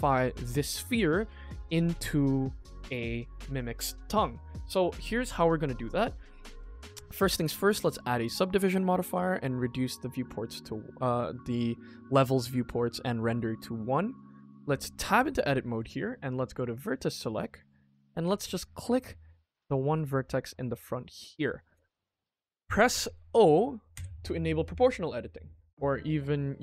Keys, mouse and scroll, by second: 0.2 ctrl+s, 4.6 middle click, 6.5 click, 6.7-7.9 drag, 9.0 click, 10.4-11.4 middle drag, 13.7 middle click, 14.6 Tab, 15.0 click, 15.3 middle click, 16.4 click, 16.8 middle click, 17.3 middle click, 18.7 click, 19.4-19.9 scroll up 1, 20.8 scroll down 2, 21.0 middle click, 21.3 middle click, 22.1 shift+middle click, 22.9 middle click, 23.9 o.